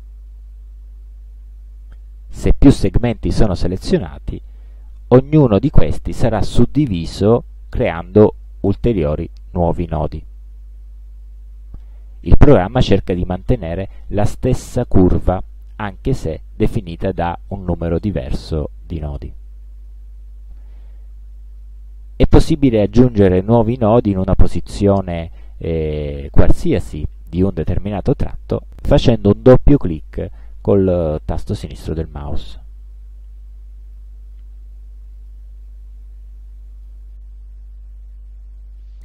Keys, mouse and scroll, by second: 4.8 click, 31.8 click, 33.0-34.2 drag, 35.1 click, 35.9-37.1 drag.